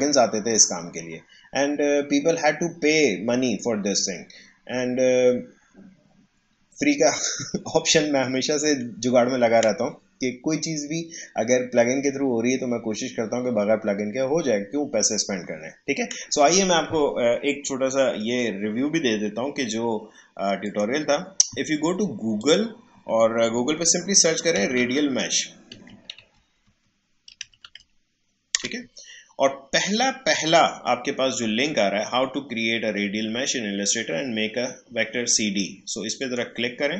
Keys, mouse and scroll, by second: 22.6 click, 24.5-27.7 typing, 28.6 Return, 36.2 click.